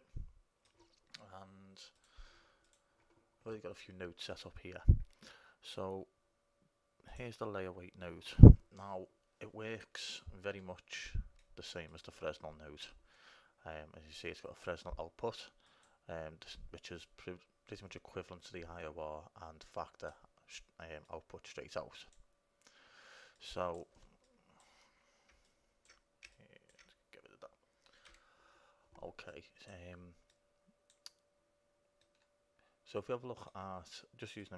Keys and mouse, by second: 2.2-4.1 drag, 7.3-8.8 right drag, 8.8-11.1 drag, 12.1-14.0 drag, 14.4-18.1 drag, 19.8-23.1 drag, 23.6-28.2 drag, 28.2 Delete, 29.5-32.2 drag, 32.2 middle click.